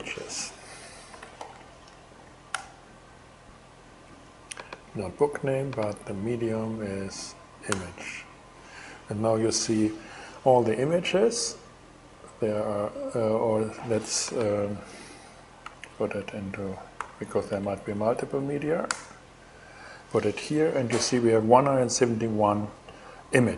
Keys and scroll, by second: 0.5-1.6 typing, 2.1 Return, 7.3 Return, 15.2 alt+9, 15.7 alt+Left, 16.6 alt+8, 17.1 alt+shift+Return, 17.9 shift+Return, 18.5 Return.